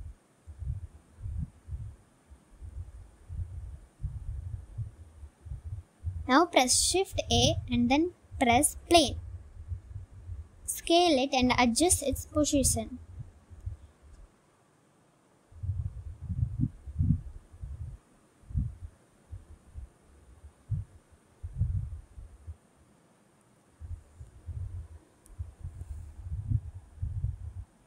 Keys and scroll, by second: 0.4 g, 0.6 x, 8.4 shift+a, 9.8 s, 11.9 s, 12.7 g, 12.9 z, 14.5 z, 17.7 g, 17.9 z, 19.2 s, 20.7 s, 20.9 y, 22.0 s, 23.7 s, 25.8 s.